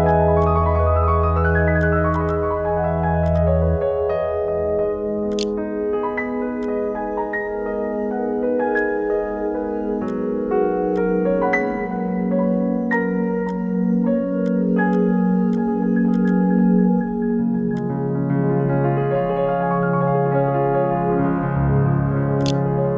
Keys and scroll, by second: 4.7 ctrl+s, 4.8 ctrl+f, 4.8 ctrl+v, 4.9 ctrl+b, 5.6 2, 19.7 2, 20.0 e, 22.4 ctrl+e.